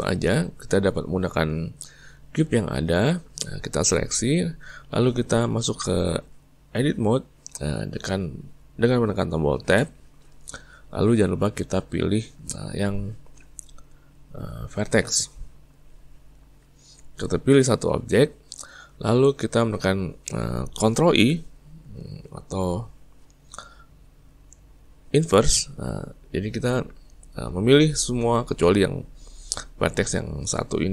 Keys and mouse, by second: 1.3-4.2 ctrl+middle drag, 4.2 click, 9.7 Tab, 16.6 click, 18.7-21.3 middle drag, 21.3 ctrl+i.